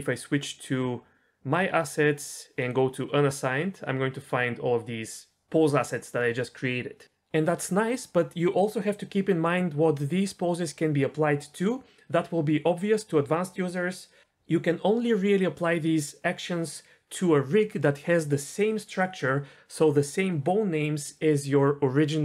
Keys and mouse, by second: 2.6 click.